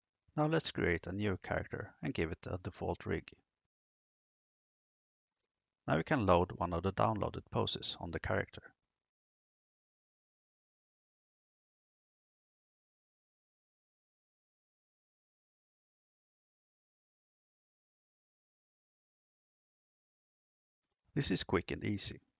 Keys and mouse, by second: 0.5 click, 1.0 click, 1.9 click, 3.0 click, 3.8 click, 4.4 click, 7.0-7.5 drag, 8.3 click, 11.2 click, 19.1 click.